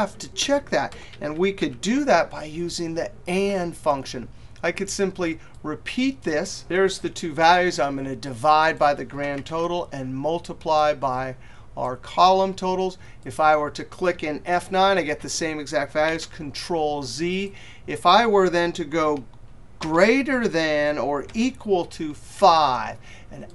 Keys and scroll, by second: 14.1 F9, 15.5 ctrl+z.